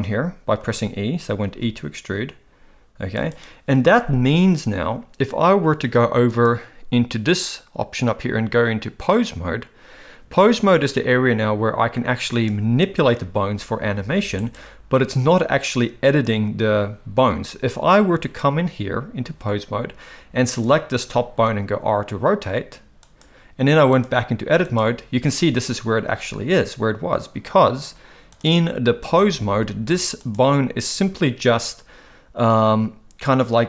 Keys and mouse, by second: 0.6 ctrl+z, 1.4 e, 6.5-9.3 drag, 12.4 click, 13.3 r, 21.5 r, 23.9-24.7 drag, 28.4-29.1 drag, 30.2 click, 30.9 r.